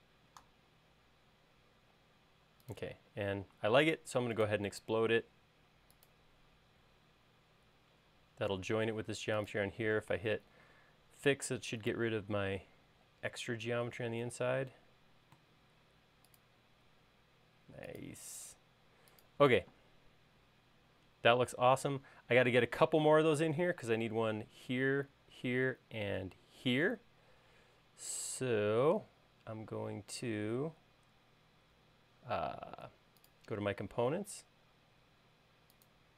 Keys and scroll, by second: 1.1 space, 20.4 space.